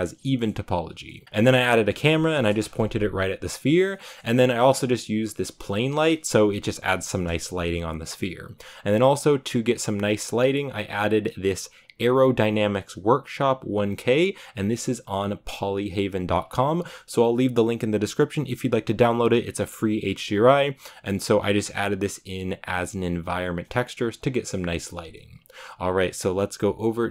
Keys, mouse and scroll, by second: 0.4-0.8 scroll down 2, 0.8 Tab, 0.9 middle click, 1.2-1.6 scroll down 1, 1.6 right click, 2.2 KP_0, 3.0-3.8 scroll down 3, 3.8-4.1 middle drag, 4.1 scroll down 1, 4.3 middle click, 4.7-6.8 right drag, 6.8 KP_0, 7.6 scroll up 3, 14.4-27.1 drag.